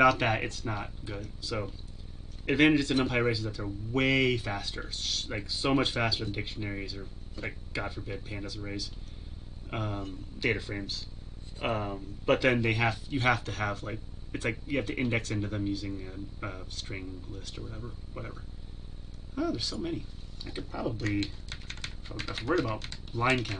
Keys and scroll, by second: 21.2 ctrl+v.